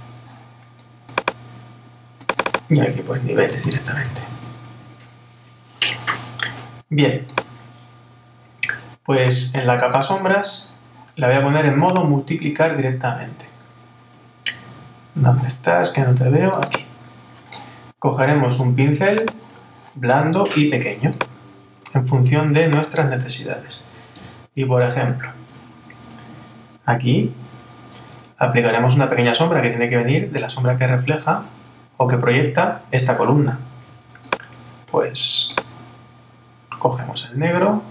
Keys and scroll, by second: 4.3 Return, 24.2 super++.